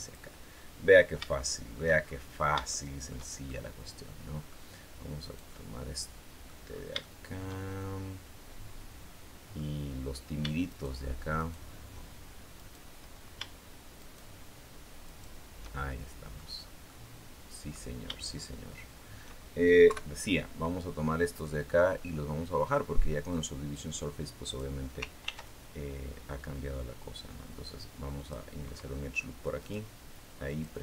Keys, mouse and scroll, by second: 0.1-1.0 scroll down 5, 1.1 shift+middle click, 1.8-2.3 shift+scroll up 2, 2.5 shift+middle click, 3.3-4.5 shift+middle drag, 5.0-6.5 right drag, 5.3-6.5 drag, 6.5-6.8 scroll up 1, 6.8-9.5 shift+middle drag, 10.5 shift+right click, 11.2 shift+right click, 12.4 shift+right click, 13.8 shift+right click, 14.9 shift+right click, 15.6 shift+middle click, 16.3-16.7 scroll down 1, 16.7 middle click, 19.7 KP_3, 21.3-24.5 drag, 25.1 ctrl+r, 28.0 click, 29.4 right click, 30.3 click.